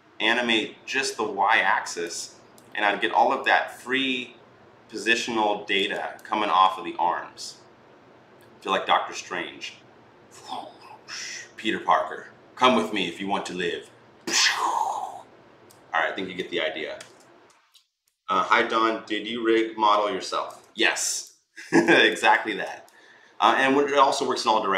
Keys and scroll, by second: 16.8 ctrl+z.